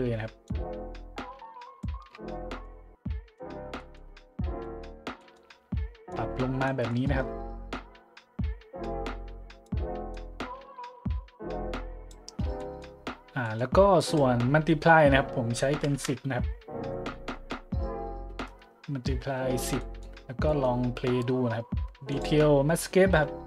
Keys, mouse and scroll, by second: 0.4-1.8 drag, 2.1 middle click, 2.3-2.6 middle drag, 2.8 middle click, 3.1-3.4 middle drag, 3.7-4.1 middle drag, 4.6 middle click, 5.1-5.5 middle drag, 6.1 click, 6.8 middle click, 7.7-8.8 drag, 9.0-9.6 drag, 10.1-12.1 drag, 12.6 middle drag, 13.4-13.8 middle drag, 14.0 click, 15.7 KP_1, 15.8 KP_0, 15.9 KP_Enter, 16.9 middle click, 17.3 middle click, 19.8 middle click, 20.4-20.8 middle drag, 22.1 click.